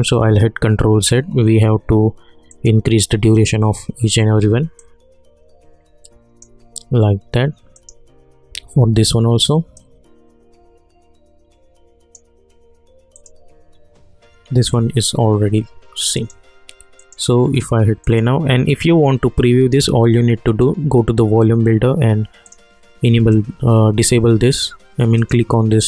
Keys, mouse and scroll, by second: 2.5 click, 4.8-13.1 drag, 16.1 click, 20.4 click, 25.1 click.